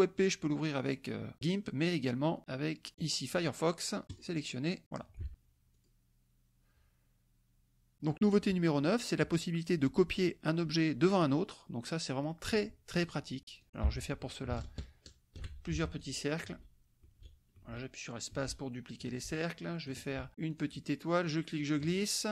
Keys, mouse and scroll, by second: 2.9 scroll down 2, 3.3-4.1 scroll up 2, 4.1 click, 5.2 alt+Tab, 5.3 click, 5.9 click, 13.6 click, 14.5-15.5 ctrl+shift+drag, 15.8 ctrl+shift+F1, 15.9-20.0 ctrl+shift+drag, 16.5 space, 18.3 space, 19.0 space, 20.5 click, 21.3 click.